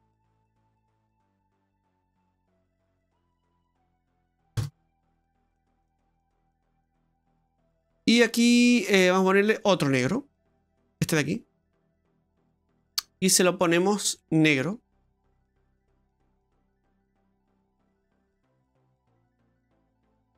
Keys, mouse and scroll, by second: 2.7 f, 3.1 f, 6.2 click, 7.3-7.6 scroll up 4, 8.3 scroll up 1, 9.6 click, 10.9 click, 12.2 click, 13.7-14.2 scroll down 5, 14.2 middle click, 14.9 click, 17.2 click, 17.9 click, 20.2-20.3 scroll up 4.